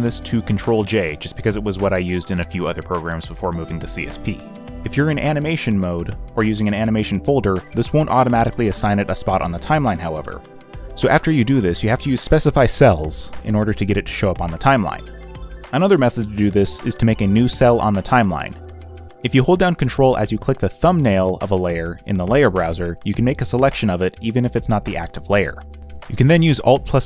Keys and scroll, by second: 14.6 ctrl+t, 26.7 alt+Delete.